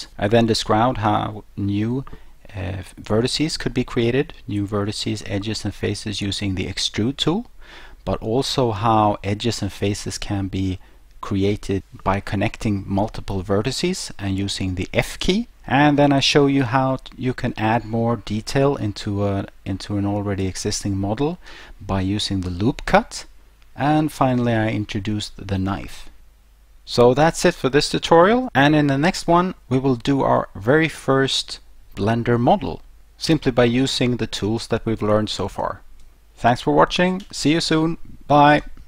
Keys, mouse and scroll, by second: 26.2 middle click.